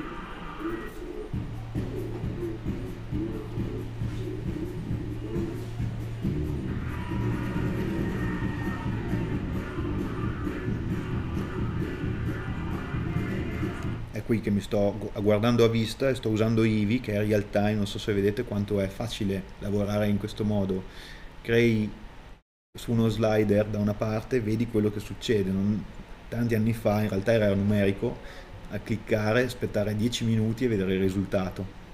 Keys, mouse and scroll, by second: 0.7-1.8 scroll down 2, 1.8 click, 2.8 middle click, 3.7 click, 4.4-5.8 scroll up 1, 6.8 middle click, 7.2 click, 8.4 scroll down 1, 8.6 middle click, 8.8 scroll up 1, 9.2 click, 10.3 click, 11.9 middle click, 12.0-31.9 drag.